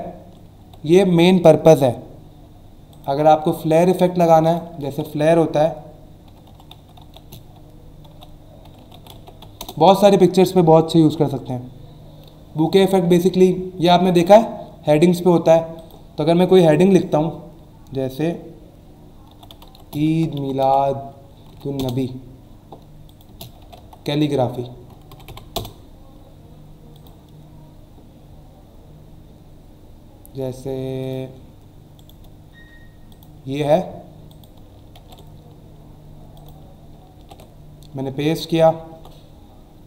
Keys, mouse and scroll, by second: 0.6 v, 2.9 click, 3.9 scroll up 1, 4.4 click, 4.8 ctrl+a, 6.4-9.6 typing, 14.2 scroll down 1, 15.8 click, 19.0-21.1 typing, 21.8 Return, 23.1 click, 23.3-24.3 typing, 25.5 Return, 26.9 click, 28.8 scroll down 1, 29.3 scroll down 1, 30.0 scroll down 1, 31.0 click, 31.9 right click, 33.1 click, 33.5 alt+Tab, 34.3 click, 35.0 ctrl+n, 36.3 click, 37.2 ctrl+v, 38.0 alt+scroll down 1, 38.4 alt+scroll up 1, 38.9 alt+Tab.